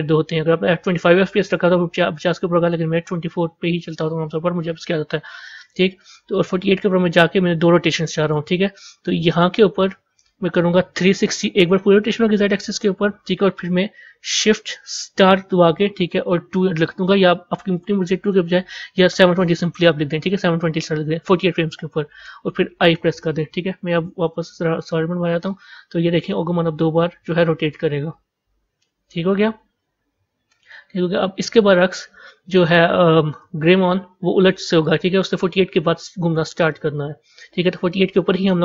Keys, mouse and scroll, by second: 6.2 click, 8.1 click, 9.2-12.3 drag, 22.7 i, 24.0 z, 25.3-28.3 drag, 34.7 click, 36.5 click.